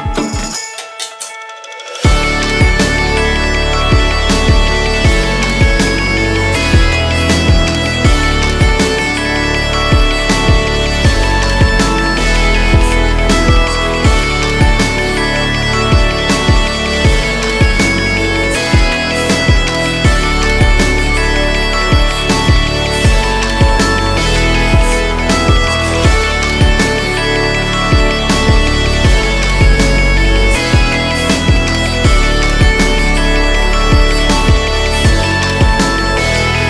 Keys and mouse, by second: 6.2 shift+a, 13.6 Tab, 14.3 s, 18.3 s, 19.3 2, 21.8 e, 24.3 click, 26.0 shift+click, 27.1 click, 27.8 alt+s, 29.7 click, 31.1 click, 31.5 shift+click, 31.9 shift+click, 32.8 ctrl+b.